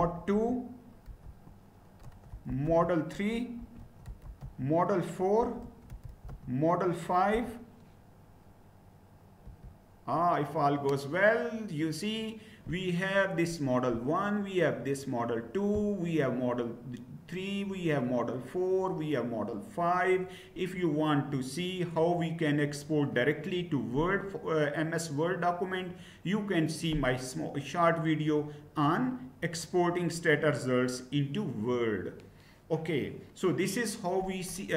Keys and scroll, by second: 0.0-7.4 typing, 9.5 Return.